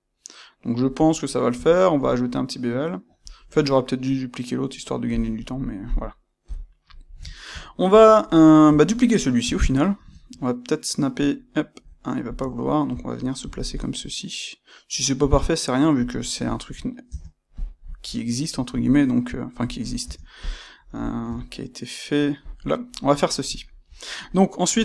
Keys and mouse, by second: 5.1 click, 5.3-12.3 middle drag, 6.4 KP_1, 9.3 shift+d, 12.3 click, 12.5-16.1 ctrl+middle drag, 13.3 g, 16.1 click, 16.4-17.5 shift+middle drag, 17.0 Tab, 17.5 click, 18.6 g, 19.7 click, 19.9 Tab, 20.3 click, 21.2 g, 22.4 click, 23.5-24.8 shift+middle drag.